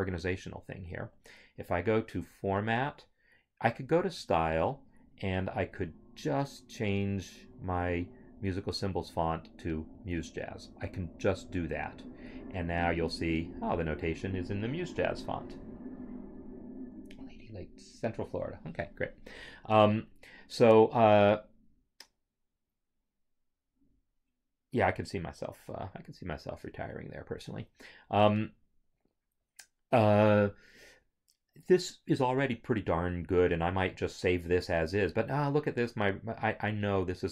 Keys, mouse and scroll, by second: 0.6 click, 8.4 click, 10.0 click, 12.4 Return, 19.9 scroll, 24.2 scroll, 27.5 scroll, 29.4 scroll, 30.0 scroll, 33.0 scroll.